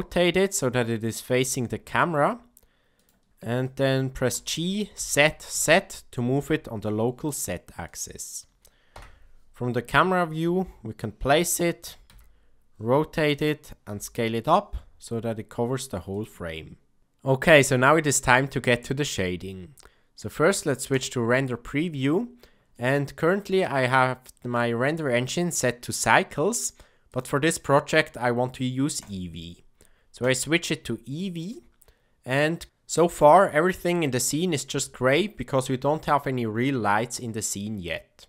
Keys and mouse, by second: 1.3 r, 3.6-3.9 shift+middle drag, 4.2 g, 8.9 KP_0, 10.3 g, 12.1 r, 13.8 s, 22.7-23.3 ctrl+middle drag, 27.0 click, 29.1-30.3 drag.